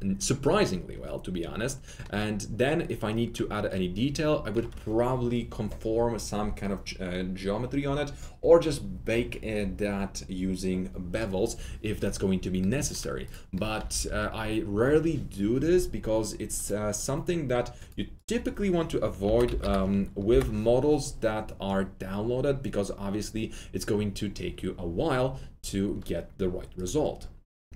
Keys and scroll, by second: 13.7 F3, 13.9 F3, 14.0 F4, 14.7 F4, 19.0-20.1 typing, 20.2 Return.